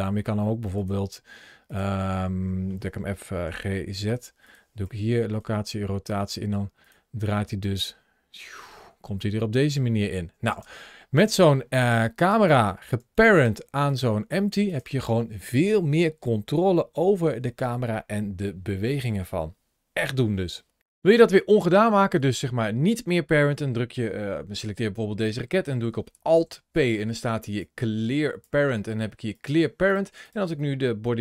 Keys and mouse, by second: 0.7 click, 1.6 click, 2.2-2.6 middle drag, 3.3 g, 3.8 z, 4.3 click, 4.7 i, 10.4 space, 11.2 middle drag, 12.1 click, 12.8 g, 13.2 click, 13.7 click, 13.9 g, 14.5 click, 21.5 middle click, 22.0 click, 26.2 alt+p, 30.9 g.